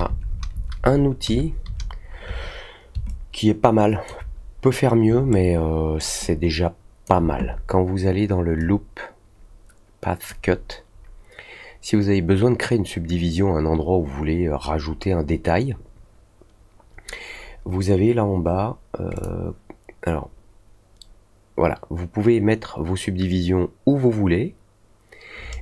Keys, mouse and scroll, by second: 3.0-4.0 alt+drag, 5.3-5.9 alt+middle drag, 6.2 alt+click, 8.5-10.2 drag, 19.1 click.